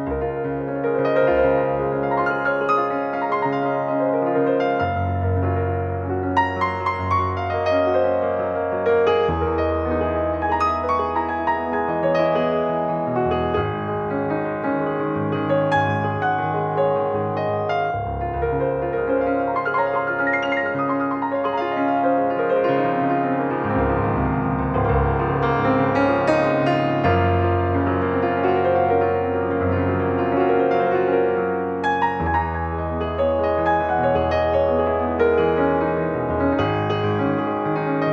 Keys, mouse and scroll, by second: 0.0 click, 4.0 ctrl+2, 4.5 Escape, 7.0 click, 10.7 ctrl+2, 12.0 click, 14.4 ctrl+Escape, 17.9 ctrl+2, 19.5 ctrl+click, 23.1 click, 25.9 click, 31.1 click, 36.5 click.